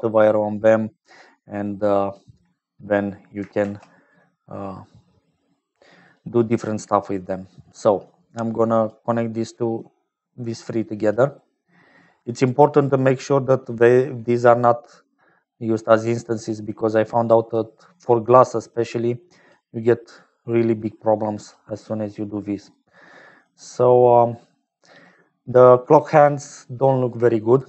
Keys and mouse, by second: 0.5 click, 1.5 click, 3.5 shift+a, 8.1 click, 9.7-11.3 drag, 12.1-14.0 drag, 15.4 middle click, 16.6 click, 18.7 click, 20.2 click, 21.0 click, 23.1 click.